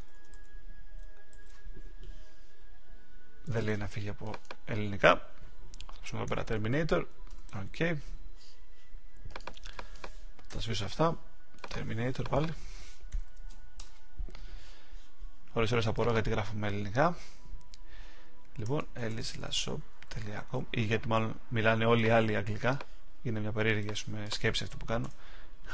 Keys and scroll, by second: 1.3 super+a, 7.2 Return, 13.7 Return.